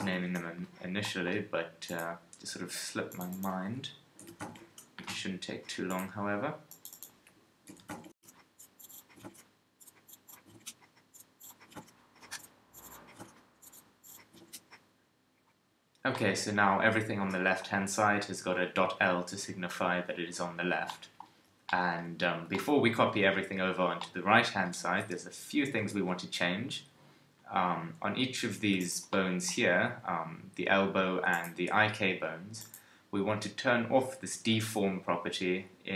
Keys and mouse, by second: 1.0-3.1 drag, 5.0 middle click, 5.9 click, 8.1 click, 8.4 middle click, 9.0 middle click, 9.6-11.0 right drag, 11.0 click, 11.7 click, 13.2 middle click, 13.5 click, 14.1-16.2 middle drag, 25.3 KP_3, 35.4-35.9 middle drag.